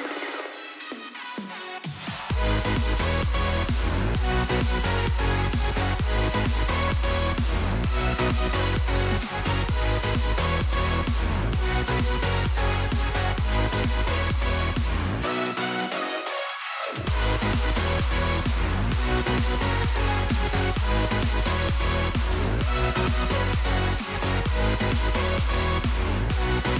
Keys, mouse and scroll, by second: 0.4 right click, 0.5-2.7 scroll down 1, 3.0 scroll up 1, 14.0 scroll up 1, 14.0-15.2 scroll down 1, 19.7-20.5 scroll down 1, 20.5-21.8 scroll down 1.